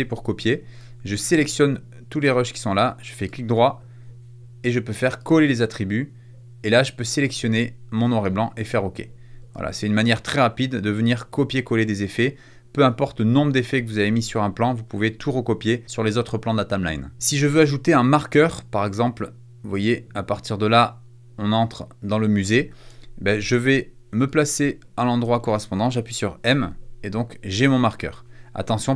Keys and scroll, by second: 26.4 m.